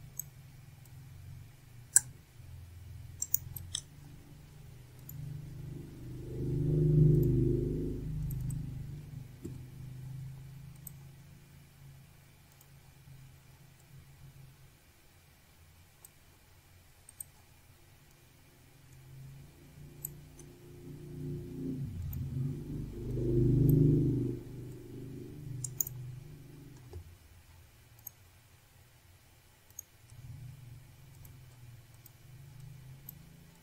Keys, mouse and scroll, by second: 0.5 click, 1.2 click, 1.8 click, 4.2 click, 5.0 right click, 7.9 click, 9.2 click, 10.4 click, 11.9 click, 13.2 click, 17.2 click, 18.1 click, 19.2 click, 21.6 shift+right click, 23.1 click, 25.2 click, 26.2 click, 26.5 double click, 27.4 3, 28.7 click, 30.3 click.